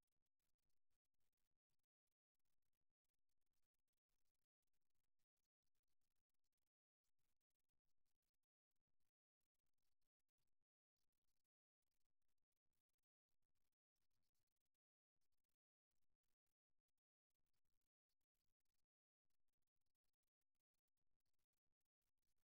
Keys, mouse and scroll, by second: 2.1-4.0 right drag, 9.0-11.0 right drag, 10.4 e, 13.7-15.7 right drag, 18.7-21.9 right drag, 21.9 e.